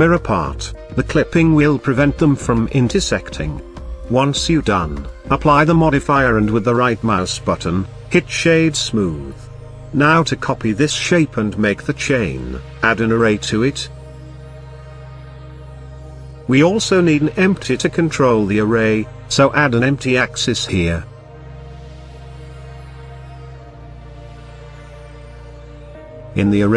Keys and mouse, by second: 1.1 click, 2.2 Tab, 3.7-4.3 drag, 4.9-5.5 middle drag, 5.6 z, 7.1 click, 7.4-9.0 right drag, 10.5-11.0 middle drag, 13.5-15.4 drag, 19.2 shift+a, 25.4 click.